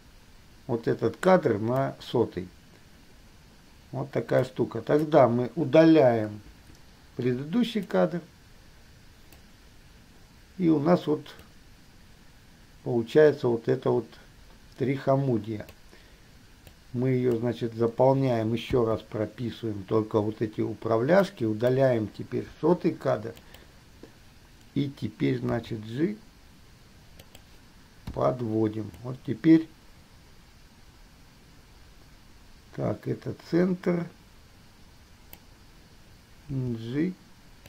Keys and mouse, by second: 4.6-5.1 drag, 6.8 Delete, 8.1-8.8 drag, 9.1 click, 11.6 click, 16.0-17.0 middle drag, 22.8 Delete, 23.6 click, 25.8 g, 28.3 i, 34.8 click, 36.6 g.